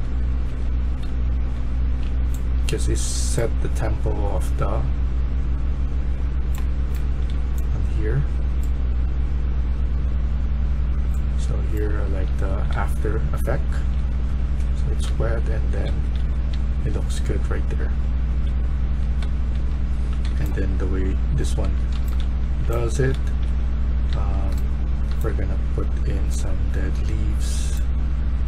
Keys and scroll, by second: 0.0-1.9 typing, 6.3-7.2 typing, 11.3-16.4 typing, 17.8-20.2 typing, 21.3-24.3 typing.